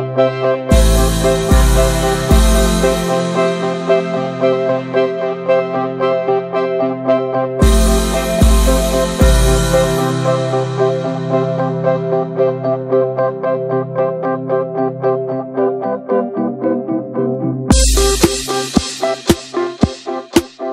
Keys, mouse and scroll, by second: 1.5 middle click, 2.1 ctrl+s, 2.4 shift+middle click, 2.6 click, 2.9 Tab, 3.1 Tab, 3.2 click, 3.5 l, 5.2 scroll down 1, 5.4 middle click, 5.5 scroll up 1, 5.7 shift+middle drag, 6.0 click, 6.4 l, 7.6 g, 8.4 scroll down 2, 8.6 a, 9.6 click, 10.4 g, 11.1 drag, 12.0 s, 12.3 s, 13.6 s, 14.6 click, 15.0 click, 15.7-16.2 drag, 17.1 shift+middle click, 17.9 click, 18.3 scroll down 1, 19.2 click.